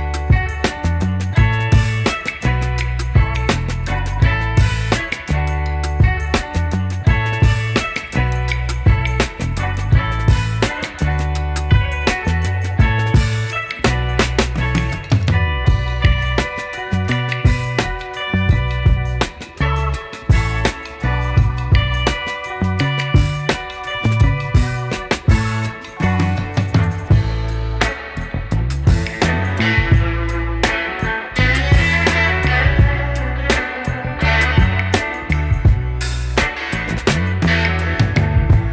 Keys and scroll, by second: 4.0 BackSpace, 14.5 KP_1, 14.8 KP_5, 17.0 KP_2, 17.4 KP_0, 18.5 KP_3, 18.9 KP_0, 20.1 KP_1, 20.4 KP_0.